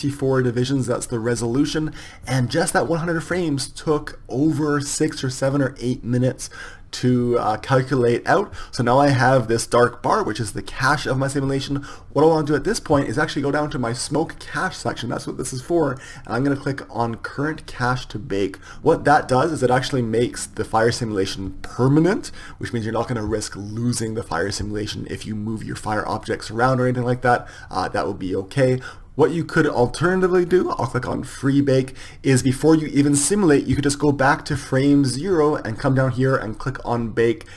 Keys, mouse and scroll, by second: 14.6-18.7 drag, 28.9-37.5 drag.